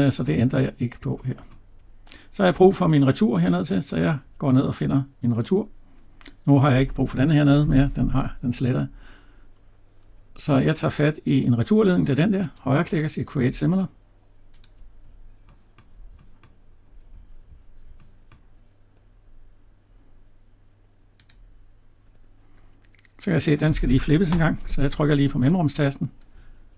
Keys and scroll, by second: 7.4 Delete.